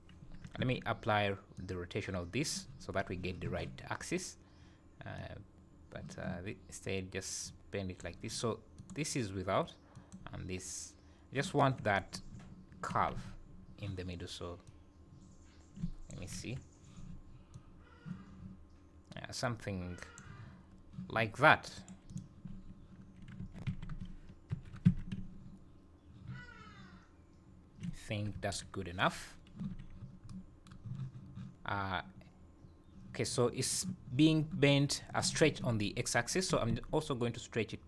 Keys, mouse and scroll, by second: 0.6 ctrl+a, 5.2 click, 8.8 click, 9.9 click, 13.1 z, 14.6 click, 16.4 KP_7, 17.5 click, 21.7 right click, 22.5 right click, 22.7 `, 23.4 Tab, 23.6 a, 24.5 shift+n, 24.8 Tab, 28.1 scroll down 2, 28.3 KP_1, 29.0 scroll up 3, 29.7 z, 36.5 s.